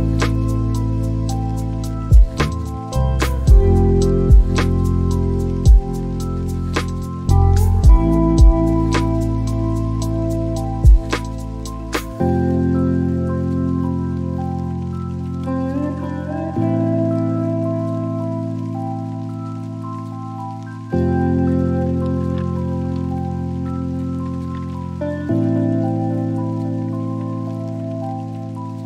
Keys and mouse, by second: 11.7 click, 18.9 Delete, 20.9 middle click, 24.3 click.